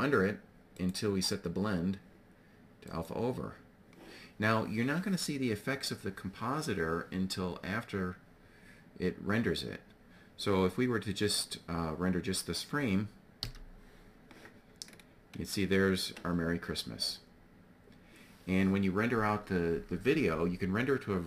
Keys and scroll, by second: 12.9 F12.